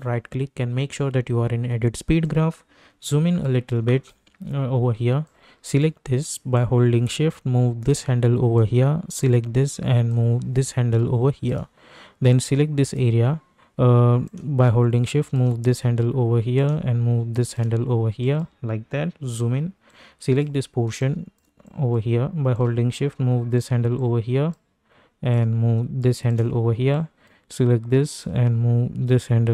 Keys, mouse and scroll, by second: 2.2 click, 2.9-4.1 typing, 5.2-8.5 drag, 8.5-12.3 drag, 12.3-16.5 drag, 16.5-18.2 drag, 19.1 =, 19.9-26.9 drag, 26.9-29.5 drag.